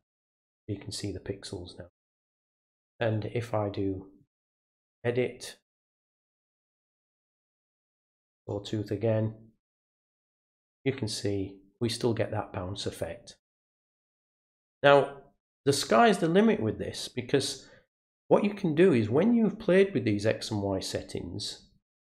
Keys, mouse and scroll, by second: 3.0 right click, 4.2 click, 5.7 click, 8.0 click, 8.8 click, 10.2 click, 13.7 right click, 15.6 click.